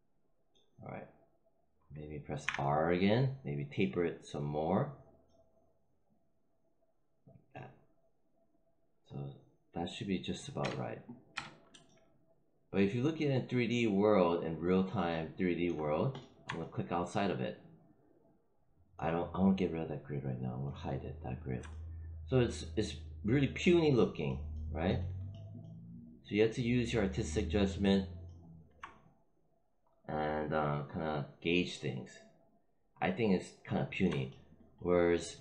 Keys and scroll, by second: 2.3 r, 10.5 space.